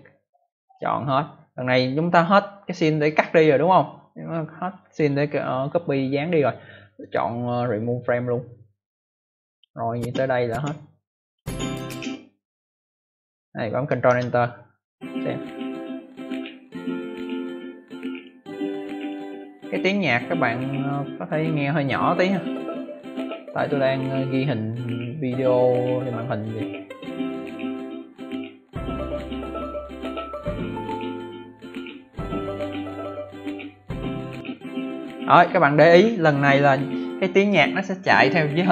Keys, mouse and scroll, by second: 0.5 click, 6.8 right click, 8.7 click, 9.4 click, 9.8 click, 11.1 click, 14.0 ctrl+Return, 18.0 click, 18.9 click.